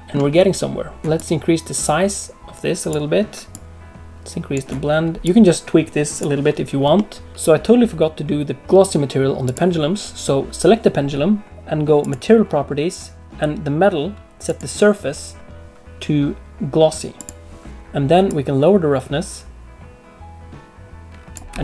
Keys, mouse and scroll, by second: 0.4-0.9 scroll up 1, 1.1 click, 3.5 click, 5.2 click, 6.9 middle click, 7.3 click, 9.4 click, 12.0 click, 14.4 click, 18.2 click, 21.4 middle click, 21.4 space, 21.5 space.